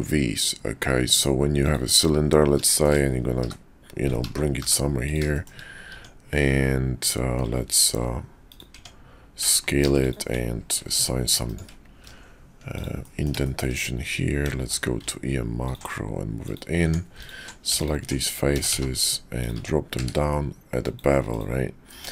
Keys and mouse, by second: 2.7 shift+middle click, 3.4 h, 4.2 ctrl+z, 4.6 g, 5.3 shift+middle click, 5.9 Tab, 7.8 ctrl+b, 8.8 Tab, 9.7 ctrl+r, 11.9 ctrl+b, 13.0 click, 13.5 shift+click, 14.5 q, 16.8 Tab, 17.8 alt+click, 18.5 s, 19.6 Tab, 20.9 q, 21.9 Tab.